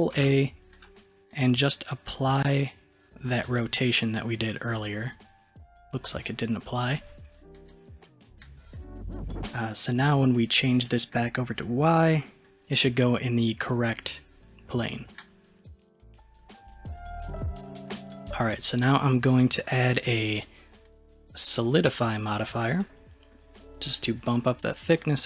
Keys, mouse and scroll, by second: 0.2 ctrl+a, 6.0 click, 6.9 click, 8.3-11.6 middle drag, 11.6 click, 12.2-14.5 middle drag, 17.0-17.9 middle drag, 17.9 click, 22.1 click, 22.8-24.0 middle drag, 24.0-25.2 drag.